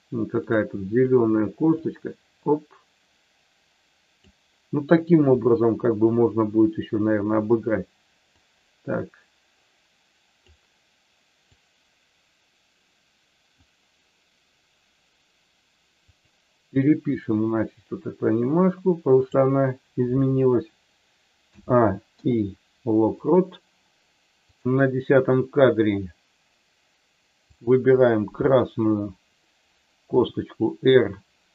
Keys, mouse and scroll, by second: 0.4 click, 1.7-4.2 drag, 8.4-10.5 drag, 11.6-13.6 drag, 16.1 click, 17.3-19.3 drag, 21.5 a, 22.1 i, 24.4 click, 27.4 click, 30.1 r.